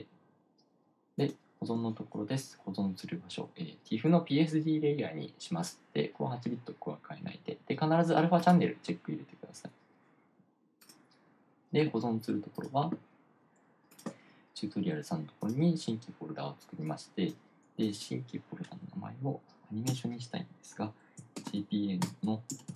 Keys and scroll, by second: 21.8-22.6 typing.